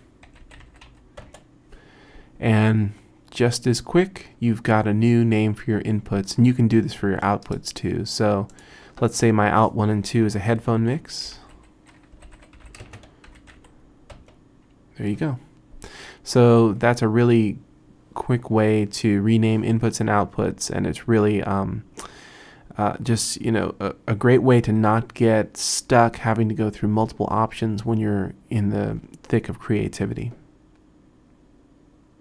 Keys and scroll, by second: 0.0-1.4 typing, 10.6-14.1 typing, 14.2 Return.